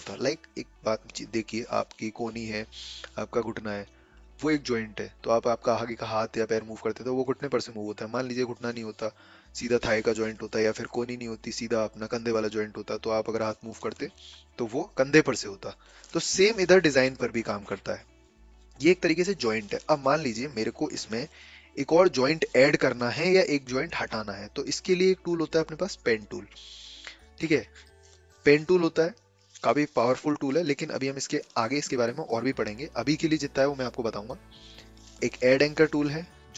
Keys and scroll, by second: 16.4 a, 16.8 ctrl+z, 17.3 ctrl+z, 19.7 ctrl+z.